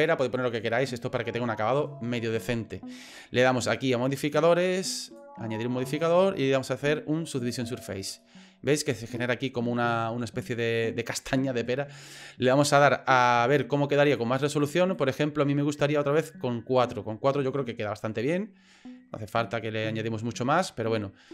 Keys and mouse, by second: 5.2-7.6 drag, 8.2-9.7 middle drag, 11.2 middle click, 14.0 click, 14.5 click, 16.0-18.9 middle drag, 19.4 middle click.